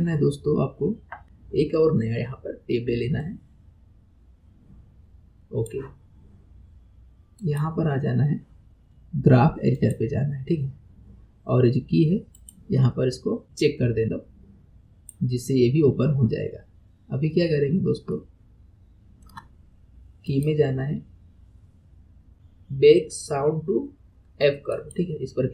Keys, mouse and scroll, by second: 3.2-6.2 drag, 7.4-10.5 drag, 12.4 click, 14.0-17.0 drag, 17.0-18.1 scroll down 2, 18.1-20.3 shift+middle drag, 20.3-22.3 drag.